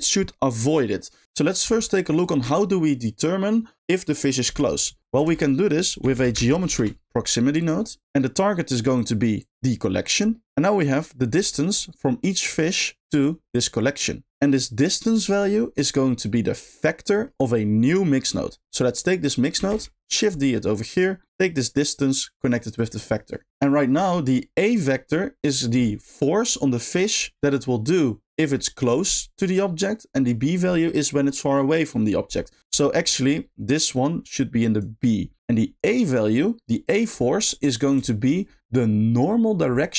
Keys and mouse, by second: 2.2 click, 5.2 shift+a, 7.8 click, 8.9 middle click, 9.4 click, 10.4-14.3 middle drag, 14.3 ctrl+x, 14.5 click, 15.9 middle click, 17.1 middle click, 18.4 middle click, 18.8 click, 19.7 shift+d, 20.3 click, 20.9 middle click, 21.3-22.4 drag, 22.7 click, 23.7 middle click, 32.9 middle click, 33.7 click, 34.0-34.8 drag, 38.1 shift+middle click.